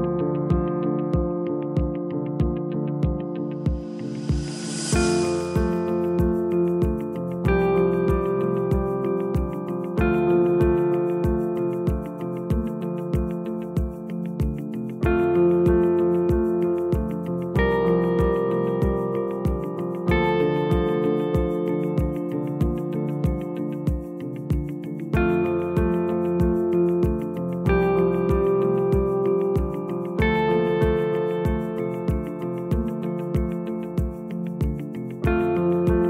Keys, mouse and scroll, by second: 2.3-3.5 drag, 3.5 Tab, 5.0 click, 7.8 Delete, 11.9-13.0 scroll up 1, 13.1 click, 14.9 Delete, 19.2 click, 20.2 Delete, 25.3 click, 26.2 Delete, 29.2 click, 29.9 Delete, 33.5 click, 34.5 Delete.